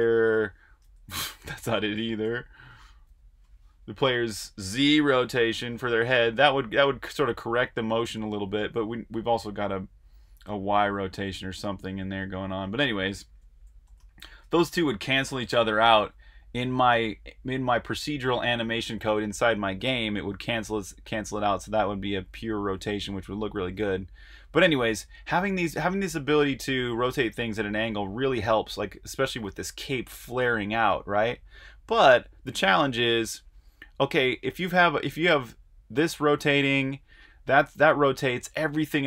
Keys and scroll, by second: 0.0-0.7 typing, 2.2-3.5 typing, 5.0-5.7 typing, 13.8 typing, 15.4 0.